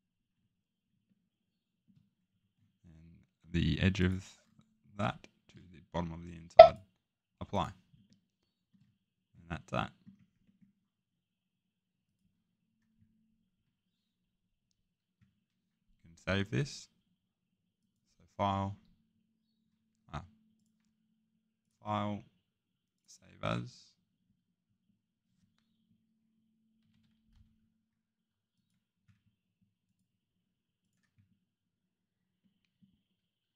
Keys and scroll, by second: 13.5 Escape, 26.8-27.3 typing.